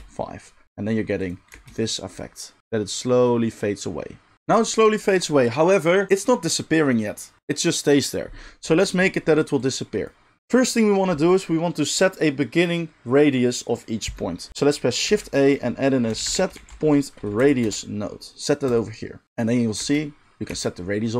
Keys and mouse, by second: 1.5 space, 4.3 space, 15.0 shift+a, 18.7-19.3 middle drag, 19.3-21.1 drag, 19.8 space, 20.5 space.